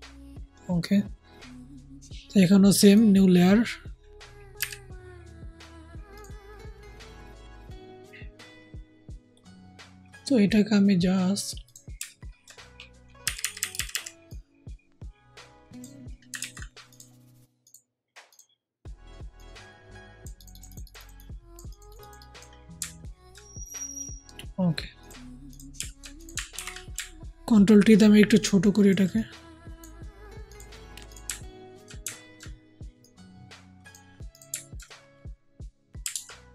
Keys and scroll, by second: 4.5 ], 5.7 ], 13.1-13.8 typing, 16.3 ctrl+z, 26.4 ctrl+alt+t, 36.0 alt+Tab.